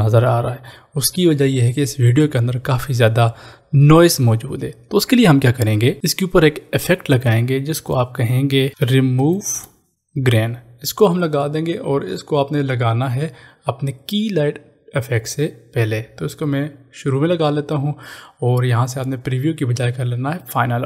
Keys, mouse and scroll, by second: 6.0 ctrl+s, 7.1 click, 8.5-9.7 typing, 10.6 click, 15.0 click, 19.5 click.